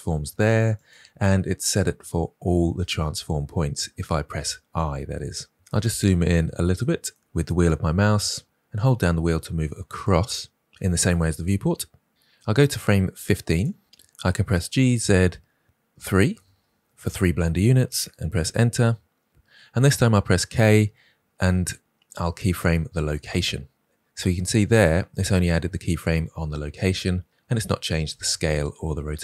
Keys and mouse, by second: 0.7 click, 5.7 ctrl+click, 6.8 middle click, 13.6 click, 14.4 g, 20.3 k.